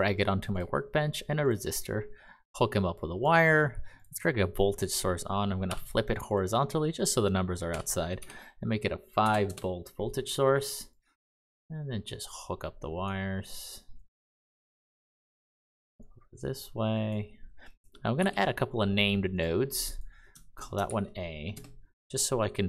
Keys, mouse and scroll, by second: 1.4 click, 4.7 click, 5.6 h, 7.6-9.2 typing, 9.4 Return, 18.1 n, 19.3 click, 20.8 a, 21.5 Return.